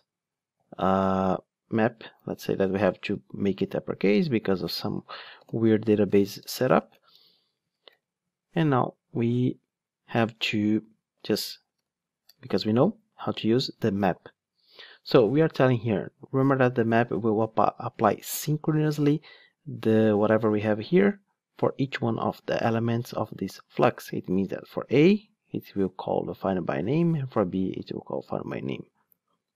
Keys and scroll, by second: 2.3 Return, 7.0 Return, 12.3 Return.